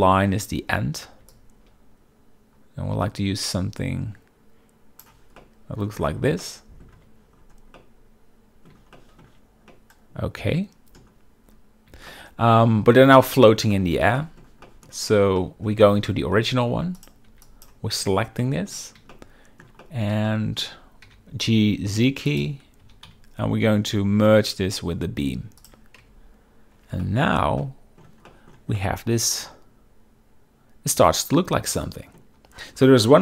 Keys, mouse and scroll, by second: 1.4-5.2 shift+drag, 5.5-5.9 middle drag, 6.5-7.0 middle drag, 7.2 z, 7.9-8.8 middle drag, 9.1 shift+middle click, 9.8-11.1 middle drag, 10.0-10.4 scroll, 10.9 scroll, 12.2-12.5 shift+middle drag, 13.3 shift+middle click, 13.8 middle drag, 14.3 shift+middle click, 14.8 shift+middle click, 15.5 shift+middle drag, 15.9 middle drag, 16.3 Tab, 16.7 z, 17.1 click, 17.4 b, 17.6 drag, 18.1 z, 18.5 middle drag, 19.2-19.7 shift+middle drag, 19.9 middle click, 20.4-20.7 shift+middle drag, 21.1 g, 21.6 z, 22.4 click, 22.9 g, 23.2 z, 25.7 shift+click, 26.1 Tab, 27.1 shift+middle click, 27.7-28.1 middle drag, 28.4 shift+middle drag, 28.9-32.3 middle drag.